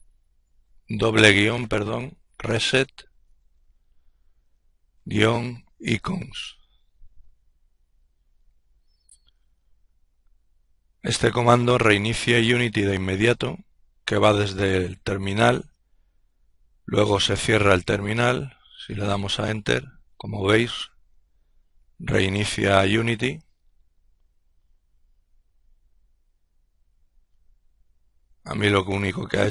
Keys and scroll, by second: 0.0-3.9 typing, 15.2 Return.